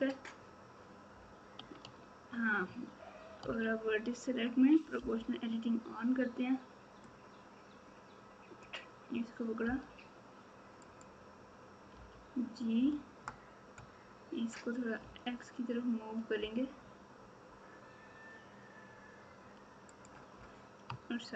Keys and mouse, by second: 1.8 Tab, 4.9 o, 7.1-8.6 drag, 9.6 g.